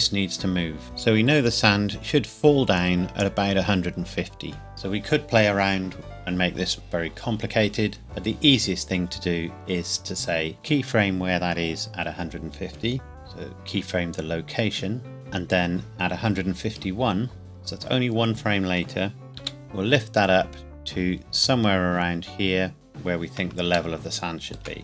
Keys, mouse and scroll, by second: 0.8 click, 10.5 click, 13.1 i, 17.4 click, 19.4 g, 19.5 z, 22.7 click, 23.9 shift+middle click.